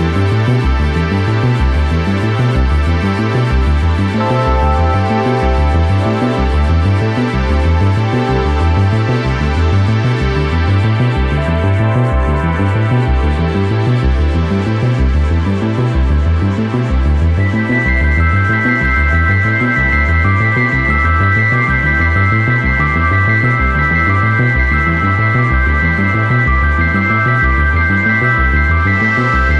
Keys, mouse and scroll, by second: 0.2 g, 0.8 a, 1.0 s, 2.2-2.6 scroll up 2, 2.6 KP_7, 2.9 g, 4.5 KP_0, 5.1-5.5 scroll down 1, 5.5 a, 5.6 Tab, 5.8 right drag, 6.0 g, 6.5 Tab, 7.0 ctrl+r, 7.4 ctrl+r, 8.1 3, 8.2 right click, 8.4 middle click, 8.7 right click, 8.8 middle click, 8.9 shift+right click, 9.2 middle click, 9.4 middle click, 9.8 Tab, 10.3 w, 11.2 Tab, 11.3 Tab, 11.6 Delete, 12.0 KP_0, 12.4 Tab, 12.8 click, 14.2-15.0 drag, 15.1 click, 15.6 middle click, 16.0 KP_0, 16.5 Tab, 16.7 right click, 17.2 e, 19.1 ctrl+z, 19.5 right click, 19.7 e, 20.0-20.6 scroll up 3, 20.1 shift+middle click, 20.6 3, 20.7 right click, 21.5 s, 23.2 KP_7, 23.4 scroll up 5, 23.6 shift+middle click, 23.8 g, 24.6 click, 24.7 g, 26.1 KP_0, 26.3 e, 28.3 Tab, 28.5 right click, 28.9 Tab, 29.0 scroll down 4, 29.3 shift+middle click.